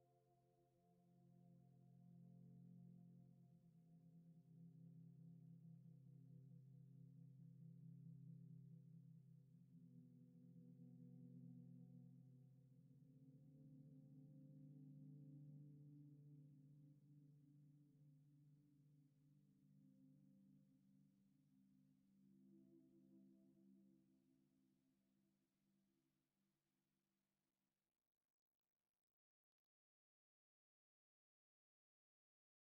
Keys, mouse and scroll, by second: 1.0 Return, 1.5 ctrl+z, 3.2 typing, 3.8 Return, 4.2 scroll up 1, 6.7 typing, 7.6 Return, 9.0 scroll down 1, 9.6 scroll up 1, 9.8-10.2 scroll down 1, 10.7 shift+middle click, 11.7 right click, 12.6-14.1 scroll down 1, 14.3 ctrl+l, 14.9 typing, 16.7 middle click, 18.0-18.7 scroll down 1, 18.7 middle click, 22.8 g, 25.9 middle click, 27.1 Tab, 27.6 Tab, 29.8-31.6 typing, 31.1 Return.